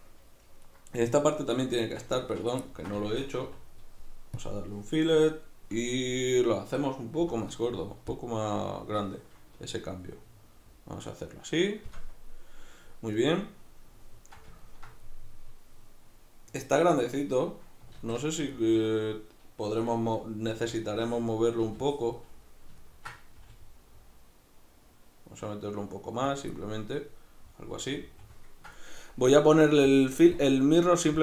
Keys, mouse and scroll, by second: 0.6 right click, 1.8 shift+right click, 2.2 z, 2.7-26.4 ctrl+middle drag, 3.4 w, 7.2 F9, 18.0 alt+q, 20.5 b, 23.4 g, 26.4 click, 26.5-29.9 middle drag, 29.9-31.2 drag.